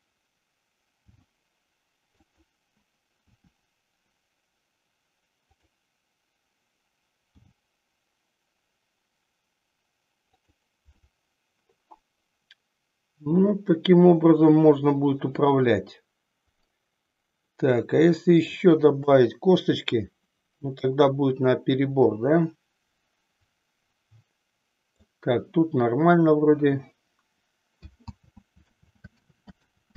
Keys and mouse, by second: 1.0 g, 2.4 click, 3.4 r, 7.3 g, 10.5 click, 11.0-18.7 middle drag, 19.0 KP_3, 22.0-25.0 middle drag, 28.3 ctrl+z, 28.9 ctrl+z.